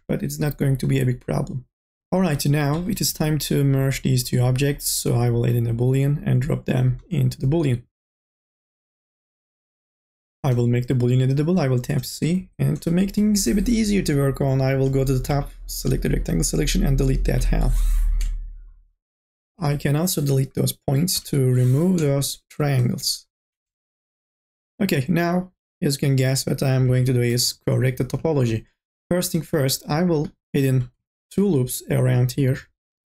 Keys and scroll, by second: 12.0 c, 12.4 1, 15.2 KP_0, 17.4 Delete, 21.1 Delete, 23.1 Delete, 26.8 k, 27.3 l.